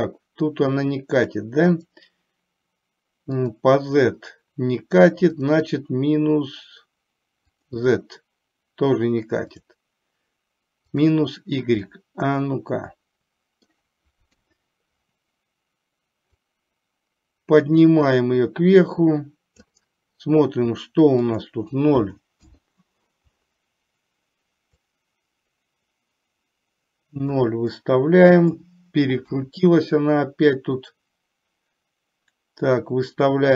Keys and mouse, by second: 1.9-3.7 drag, 5.5-7.8 drag, 9.5-11.3 drag, 12.0-13.8 middle drag, 14.5 KP_3, 16.7-19.8 drag, 21.3-22.7 drag, 24.9-27.5 drag, 27.8 middle click, 29.4 KP_1, 30.9-33.5 drag.